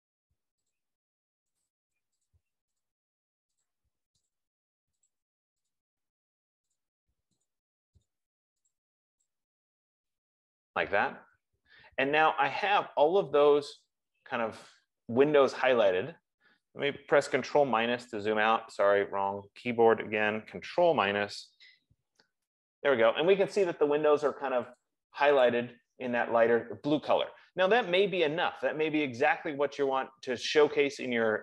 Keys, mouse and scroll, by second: 0.0 click, 1.1 click, 2.0 click, 3.2 click, 4.0 click, 5.4 click, 6.1 click, 7.3 click, 7.9 click, 8.4 click, 9.1 click, 9.6 click, 18.2 super+-, 18.2 click, 21.8 ctrl+-, 22.4 ctrl+-, 25.2 click, 25.9 click.